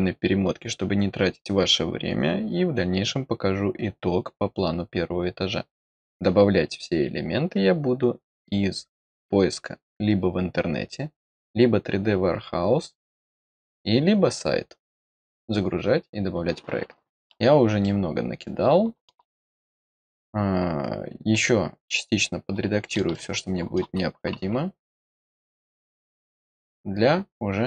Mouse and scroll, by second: 17.2-17.5 scroll down 2, 17.7-19.0 middle drag, 21.3-22.9 middle drag, 23.0 middle click, 24.9 middle click.